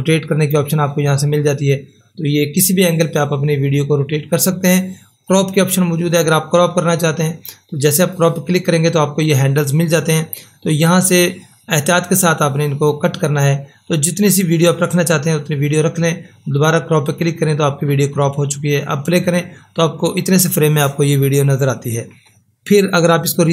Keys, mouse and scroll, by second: 8.0 click, 11.2-17.1 drag, 17.1 click.